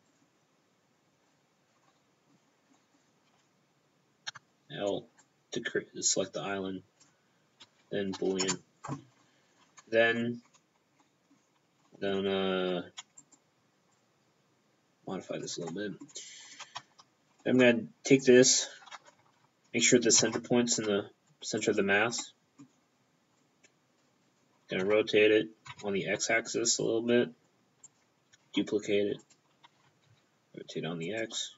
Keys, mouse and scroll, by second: 0.0 right click, 1.3 click, 1.9 middle click, 2.7 middle click, 4.3 l, 5.2 click, 7.6 space, 8.4 Return, 9.2 middle click, 9.6 scroll up 1, 9.8 Tab, 10.5-11.0 scroll down 5, 11.0 middle click, 11.8 middle click, 12.2 Tab, 13.2 right click, 13.9 click, 15.7 middle click, 16.2-16.8 scroll down 4, 16.4-17.0 scroll up 6, 16.8 Tab, 17.3 scroll up 1, 17.5 middle click, 18.2 click, 20.2 ctrl+alt+shift+c, 21.6 click, 22.2 middle click, 22.7-23.2 scroll down 1, 23.4 click, 24.3-24.8 scroll down 4, 24.8 r, 25.7 x, 27.8 click, 28.4 shift+d, 29.2 click, 29.7 r, 30.0 x, 31.0 click.